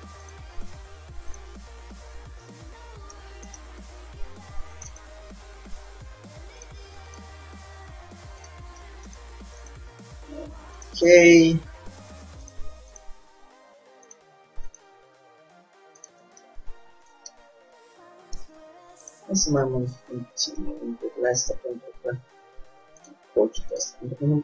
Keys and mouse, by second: 0.4 click, 0.7 g, 1.9 click, 2.2-3.3 middle drag, 5.1-6.9 drag, 5.2 g, 7.2-11.3 drag, 7.4 g, 9.9 g, 11.7-16.8 drag, 11.7 g, 13.4 g, 15.0 g, 16.6 middle click, 17.5 Tab, 18.5 Tab, 19.2 click, 19.5 g, 20.0 click, 20.9 click, 23.9-24.4 drag, 24.0 g.